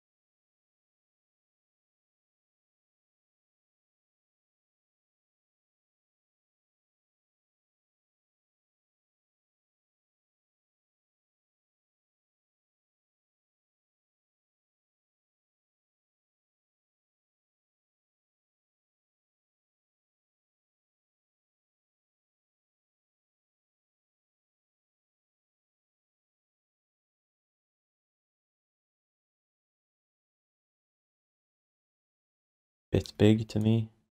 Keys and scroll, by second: 4.1 w, 5.4 r, 10.3 q, 17.4 r, 18.7 w, 23.5 r, 24.6 q, 26.9 alt+shift+d, 32.4 r.